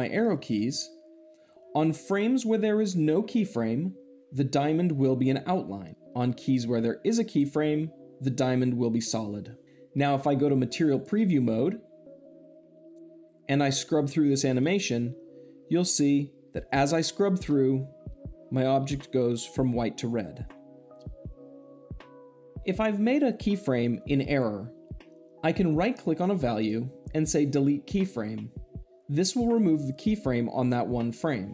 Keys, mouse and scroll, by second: 0.0 Left, 6.4-7.5 drag, 10.8 click, 14.4-15.5 drag, 26.3 right click, 27.8-28.8 drag.